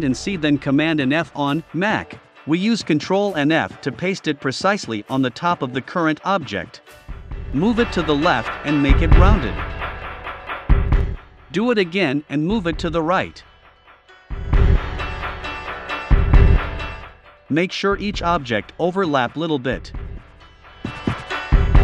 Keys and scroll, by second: 1.2 shift+Right, 5.0 Right, 5.5 Right, 9.4 Right, 11.3 super+c, 11.5 super+f, 12.0 shift+Right, 17.9 Right, 19.0 shift+Left, 20.2 Right.